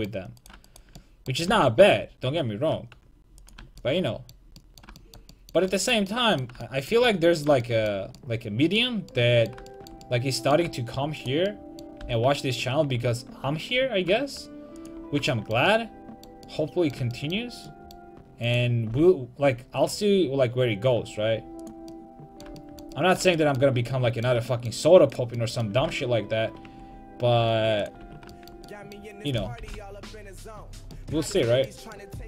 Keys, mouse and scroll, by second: 0.4 right click, 1.1-3.4 drag, 1.5 g, 3.6 a, 9.8-11.2 middle drag, 11.2-13.1 right drag, 12.1 g, 15.9 middle click, 18.5-21.6 right drag, 18.9 g, 21.8-23.1 drag, 23.1 middle click, 25.8 g, 28.1 a, 29.3-30.7 right drag, 29.6 g, 30.8 a, 31.0 middle click.